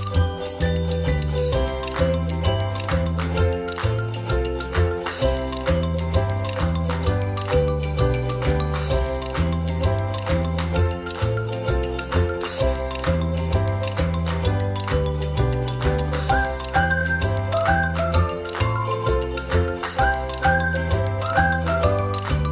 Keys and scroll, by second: 12.5 space, 13.4 Right, 13.6 Right, 13.8 Right, 14.1 Right, 14.5 a, 17.2 Down, 17.6 Left, 17.8 Left, 18.2 Left, 18.4 Left, 19.1 Down, 19.3 Left, 19.5 Left.